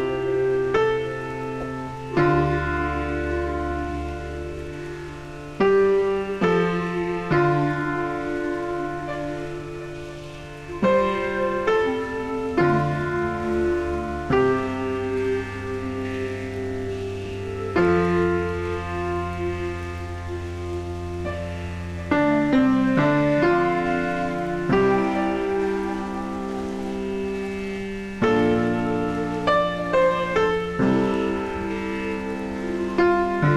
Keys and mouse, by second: 0.4 KP_2, 0.5 Return, 1.4 click, 2.5 click, 3.3 Escape, 8.9 click, 10.9 click, 11.4 click, 11.5 a, 11.6 click, 20.6 KP_0, 20.9 Return, 21.3 click, 21.6 right click, 22.3 click, 23.3 p, 23.5 Return, 25.3 click, 25.6 click, 29.5 click, 30.3 right click, 31.1 click.